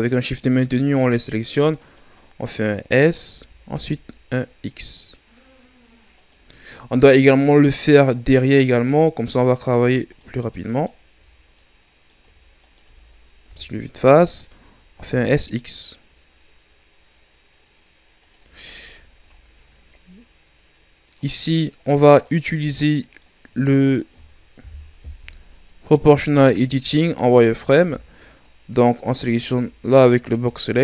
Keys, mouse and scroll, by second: 3.3 s, 6.6-7.4 scroll down 2, 7.4-10.1 middle drag, 10.1 shift+right click, 10.5-12.6 middle drag, 12.6 shift+right click, 13.4 KP_1, 14.4 ctrl+scroll down 2, 14.9 s, 18.7 shift+scroll down 4, 19.4-21.1 scroll up 2, 21.1 right click, 22.1 scroll down 2, 22.2-24.6 middle drag, 24.6 KP_1, 25.5-26.1 scroll up 4, 26.1 z, 27.4 right click, 27.8 b, 29.3 z, 30.1-30.8 ctrl+scroll down 3.